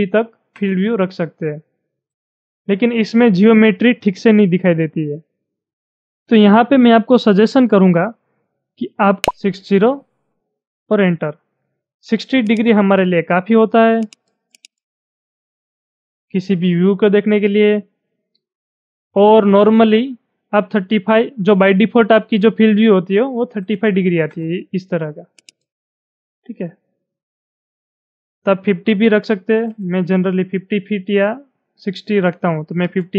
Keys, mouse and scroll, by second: 0.3 Return, 8.9-9.6 typing, 10.7 Return, 12.5-14.1 drag, 14.7-18.6 drag, 23.0-23.8 typing, 24.1 Return, 25.4-29.3 drag, 29.1-30.0 typing, 32.6 Return.